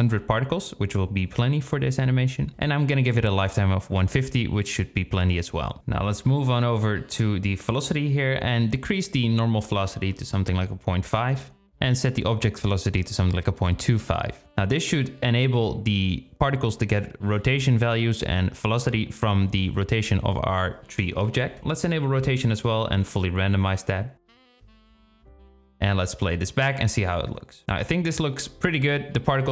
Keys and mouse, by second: 2.6-4.0 drag, 8.3-12.2 drag, 13.2-14.7 drag, 23.0 click, 23.9 click, 24.6 click, 25.2 click, 27.3 click, 27.6 space.